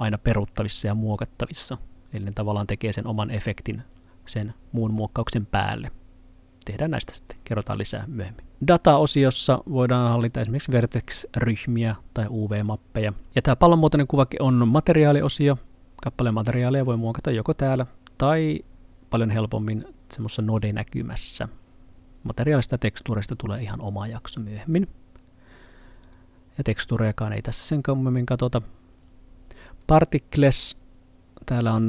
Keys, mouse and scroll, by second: 8.5 click, 13.3 click, 26.1 click.